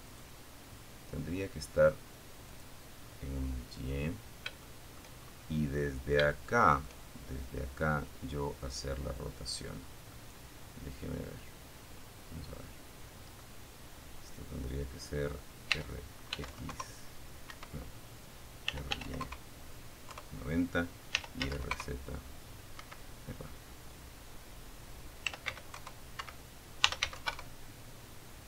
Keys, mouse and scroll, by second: 0.6 click, 2.5 scroll down 1, 2.8 shift+middle click, 3.3-3.9 shift+scroll up 2, 4.5 shift+middle click, 8.0 scroll down 1, 8.3-11.7 middle drag, 13.9 r, 14.5 x, 14.9 KP_0, 15.7 Escape, 16.9 r, 17.2 KP_9, 17.3 KP_0, 18.3 KP_Enter, 19.3 r, 19.5 z, 19.7 KP_9, 19.9 KP_0, 20.9 Escape, 23.3-25.7 typing, 24.3 Escape, 27.1 KP_Subtract, 27.8 KP_Enter.